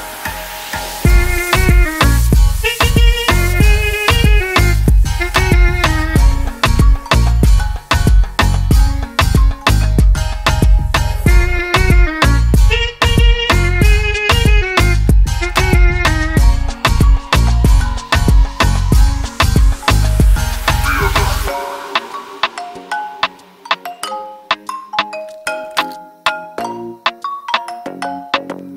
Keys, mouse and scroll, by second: 2.2 click, 7.1 ctrl+d, 8.4 click, 11.1 click, 12.0 2, 13.6 click, 13.8 click, 15.0 Return, 16.7 ctrl+d, 19.7 click, 20.3 3, 20.6 Return, 22.2 Return, 22.3 click, 22.9 3, 23.2 Return, 24.7 click, 25.2 ctrl+d.